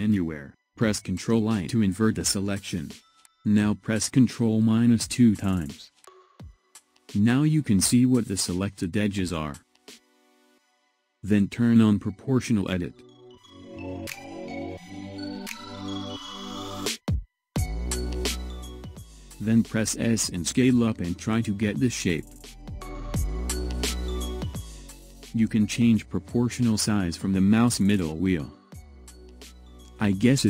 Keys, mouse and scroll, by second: 1.2 ctrl+i, 4.6 ctrl+KP_Subtract, 5.5 ctrl+KP_Subtract, 7.3-10.4 shift+middle drag, 12.8 click, 15.2-18.2 drag, 19.2 s.